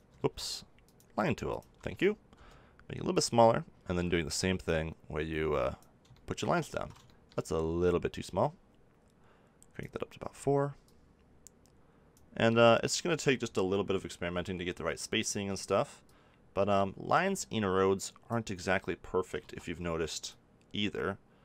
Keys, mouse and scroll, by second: 0.1 ctrl+z, 2.3 f, 2.3 click, 3.1-5.8 drag, 6.7 ctrl+z, 9.7 click, 10.8-17.9 drag, 19.4 ctrl+z, 20.2-21.4 drag.